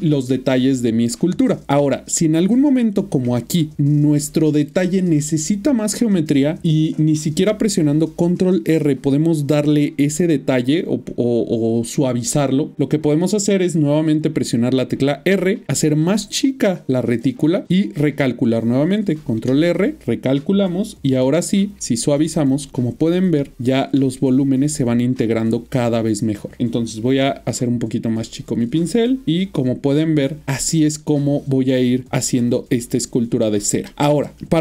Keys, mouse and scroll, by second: 1.8 middle click, 2.8 middle click, 7.7 ctrl+r, 8.8 middle click, 14.9 typing, 16.3 typing, 17.6 click, 19.3 ctrl+r, 21.1 f, 21.7 click, 25.4 middle click, 28.1 click, 29.2 double click, 31.0 click, 31.3 double click, 32.5 click, 32.6 double click, 33.9 shift+middle click.